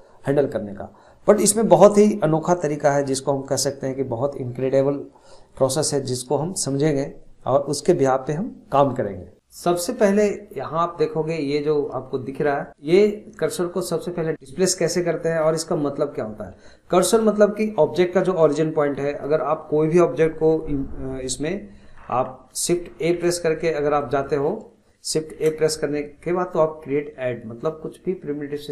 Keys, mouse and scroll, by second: 24.0 click, 25.3 shift+a.